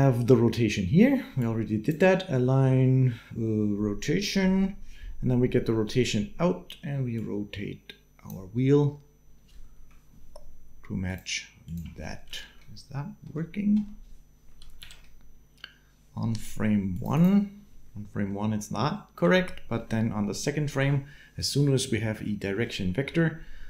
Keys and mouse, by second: 1.2 click, 6.9-8.1 drag, 10.9 click, 11.4 click, 12.1 shift+Left, 14.2 space, 14.6 shift+Left, 16.8 click, 19.0 Right.